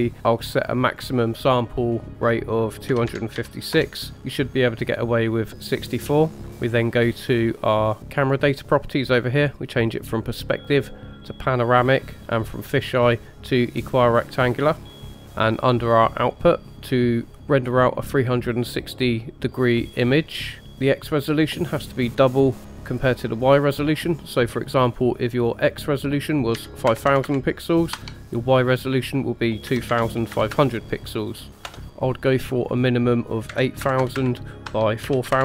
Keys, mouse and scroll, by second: 0.8-3.9 drag, 8.2 click, 9.6-11.0 drag, 12.6-15.0 drag, 16.2 click, 16.6 scroll up 2, 20.6 click, 21.8-27.1 drag, 27.1 KP_0, 30.5 KP_0, 31.7 middle click, 32.5 click, 34.0 KP_0, 34.2 KP_0.